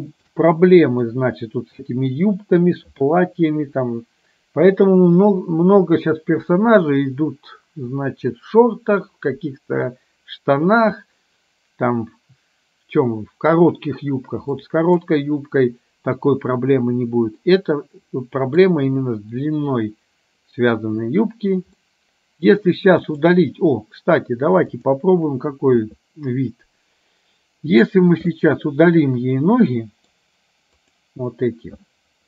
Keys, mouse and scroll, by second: 0.7-1.2 middle drag, 14.6-15.0 middle drag, 17.5-18.6 middle drag, 21.8-22.6 middle drag, 23.2 click, 24.8 click, 28.5 drag, 29.8 middle click, 31.0 click.